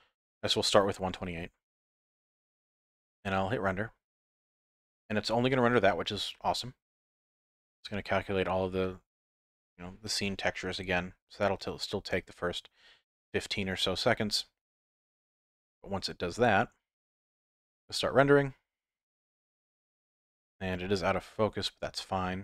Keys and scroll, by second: 3.9 F12.